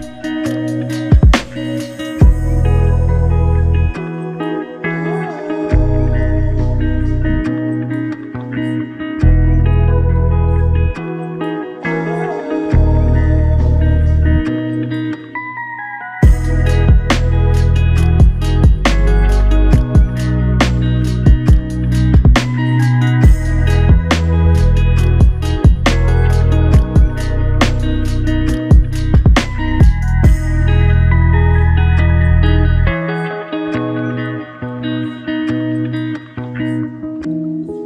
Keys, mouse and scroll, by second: 0.7 double click, 2.6 shift+click, 5.9 shift+click, 14.7 double click, 21.8 alt+click, 23.9 double click, 28.2 alt+click, 34.8 double click.